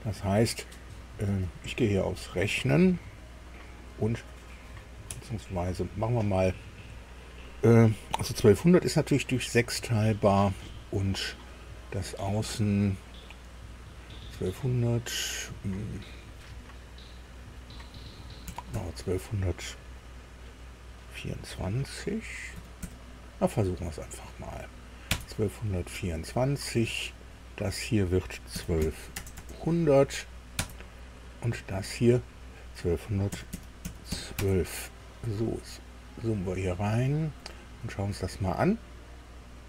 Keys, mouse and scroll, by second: 1.5 click, 5.1 Escape, 6.4 click, 18.5 KP_1, 18.7 KP_2, 22.5 KP_2, 22.8 KP_4, 25.1 KP_Enter, 27.2 click, 28.5 KP_1, 28.8 KP_2, 29.1 KP_0, 29.4 KP_0, 30.6 KP_Enter, 32.2 click, 33.3 KP_1, 33.5 KP_2, 33.8 KP_1, 34.1 KP_2, 34.4 KP_Enter, 35.2-35.9 scroll down 4, 37.2-37.9 scroll up 2.